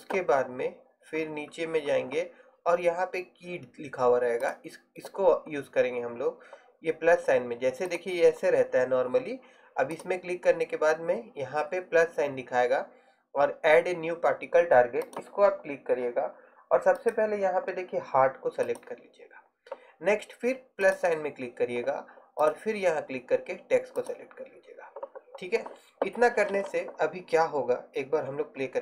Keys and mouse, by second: 10.2-19.2 drag, 20.9-24.5 drag.